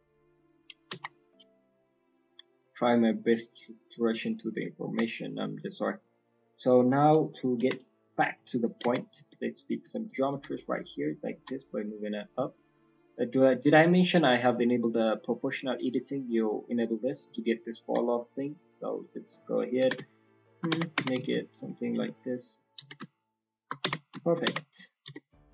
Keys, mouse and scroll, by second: 0.0 middle click, 4.8 click, 5.0 Tab, 5.0 scroll down 2, 5.2 middle click, 6.4 scroll down 2, 6.7 middle click, 7.5 KP_1, 8.0 scroll up 4, 8.4 shift+middle click, 8.7-9.1 scroll up 2, 8.8 Tab, 9.9 alt+click, 10.3 s, 11.3 g, 12.6 alt+click, 14.1 click, 16.2 click, 16.6 click, 17.8 g, 19.8 g, 21.4 alt+click, 22.7 s, 23.8 Tab, 23.9 scroll down 2, 24.2 shift+middle click, 24.4 Tab, 24.7-25.2 scroll up 2, 25.0 s.